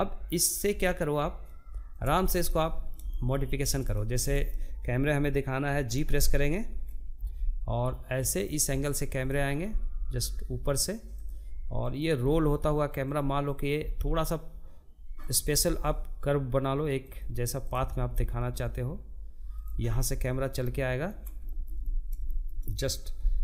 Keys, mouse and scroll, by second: 0.3 click, 0.5-5.6 shift+middle drag, 5.6 g, 7.7 click, 8.1 g, 10.4 click, 10.6 g, 12.1 click, 12.2 g, 14.0 g, 16.1 click, 16.3 g, 18.3-21.6 middle drag, 21.6 g, 23.1 click.